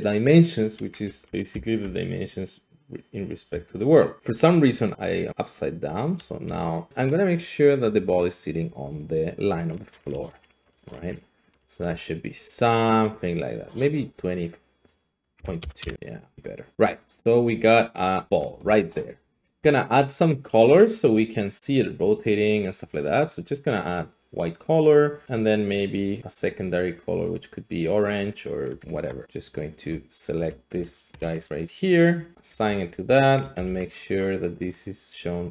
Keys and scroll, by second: 15.6 typing, 15.8 Return, 28.9 Tab, 31.1 ctrl++, 32.5 Tab, 33.6 ctrl+c.